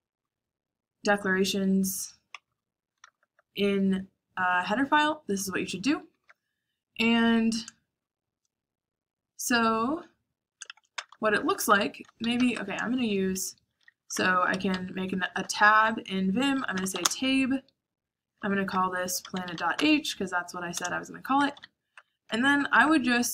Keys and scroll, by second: 2.0-3.1 typing, 5.6-6.0 typing, 10.2-13.4 typing, 11.9 Escape, 15.2-23.3 typing, 20.5 Return.